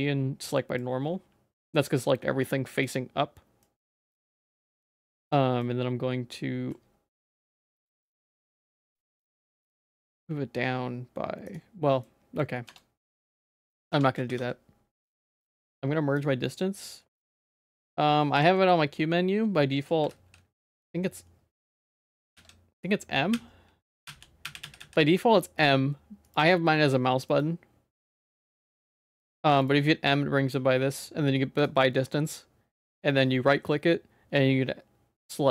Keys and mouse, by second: 0.5 middle click, 1.6-2.8 middle drag, 3.6 middle click, 4.8 middle click, 5.7-6.7 middle drag, 7.2 g, 9.6 g, 12.0 middle click, 12.8 Tab, 12.8 middle click, 13.7 ctrl+s, 13.9 Tab, 14.1 a, 14.3 q, 16.5 middle click, 18.4 q, 20.1 alt+m, 22.4 ctrl+s, 23.3-24.8 typing.